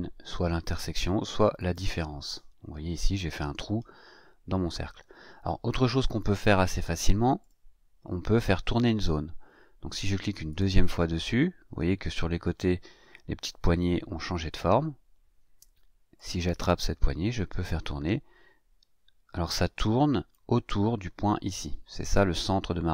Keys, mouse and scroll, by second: 1.5 click, 6.6 scroll up 2, 7.4 click, 7.9 scroll up 1, 10.5 click, 16.1-20.5 drag.